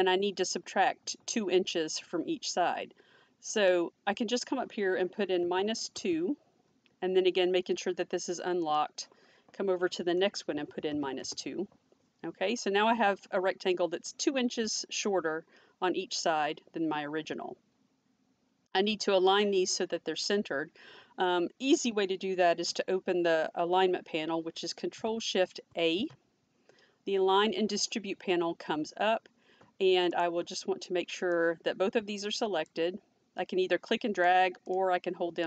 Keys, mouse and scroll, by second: 5.3 -, 5.9 2, 8.7 click, 10.5 -, 10.8 2, 11.1 Return, 12.1 Return, 25.6 ctrl+shift+a, 30.1 click, 34.2 click, 34.7 double click.